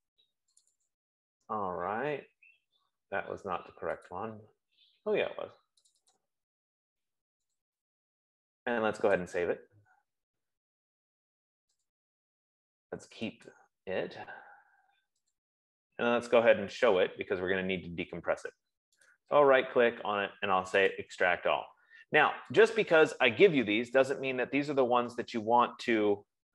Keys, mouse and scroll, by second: 1.0 click, 1.3 click, 4.5 click, 6.5 click, 8.0 click, 8.1 click, 9.8 click, 12.2 click, 13.9 click, 15.7 click, 19.6 right click, 21.3 click, 21.5 F15, 23.0 click.